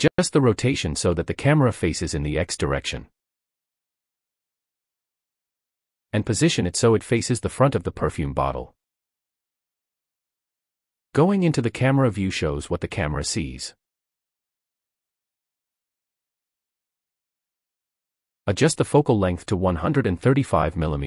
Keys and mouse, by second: 0.8-2.0 drag, 3.0 click, 4.3 click, 6.0 g, 6.2 x, 7.1 drag, 8.3 g, 8.6 z, 18.1-20.8 middle drag.